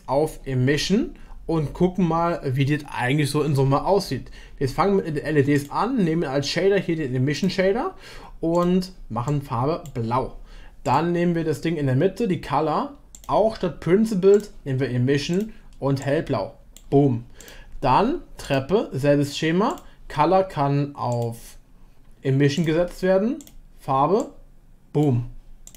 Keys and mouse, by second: 5.6-7.6 drag, 13.1-15.2 drag, 15.3 click, 17.4 click, 19.7 click, 21.1-22.6 drag, 23.4 click.